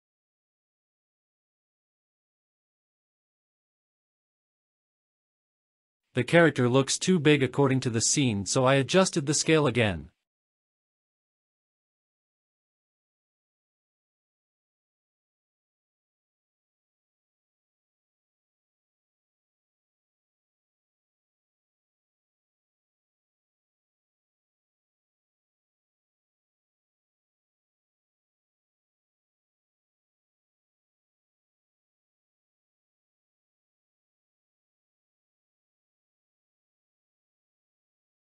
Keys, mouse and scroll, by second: 13.6 scroll up 2, 13.9 shift+middle drag, 14.5-15.6 scroll up 2, 15.6-16.0 drag, 16.2 shift+click, 17.5-17.8 scroll down 2, 18.2-18.7 scroll down 1, 23.3 click, 23.9-25.5 scroll down 1, 25.5 click, 26.3 space, 28.5 space, 29.5 click, 30.0-30.9 drag, 31.9 F12.